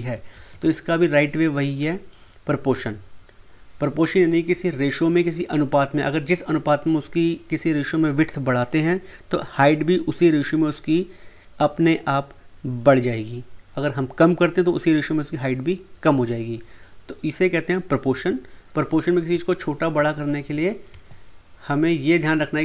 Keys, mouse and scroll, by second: 1.8-4.6 drag, 5.2-8.4 drag, 19.2-20.9 drag, 20.9 ctrl+z.